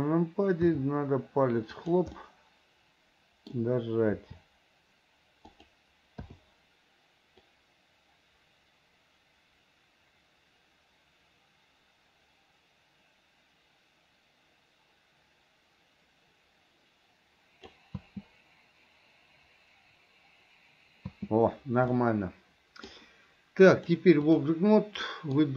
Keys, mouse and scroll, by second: 0.9 r, 2.4-3.8 middle drag, 4.4 r, 6.5 i, 7.7-18.0 drag, 18.2 space, 21.3 space, 22.1-23.1 middle drag, 24.0 click, 25.3 middle click.